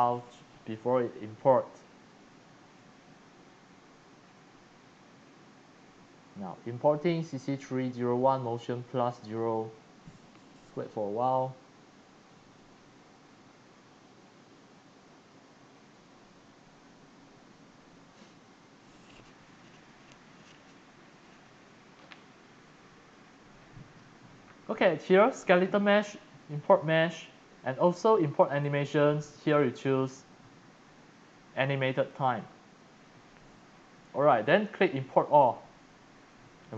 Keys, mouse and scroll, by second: 28.6 click, 29.6 click, 32.0 click, 34.7 click, 35.3 click.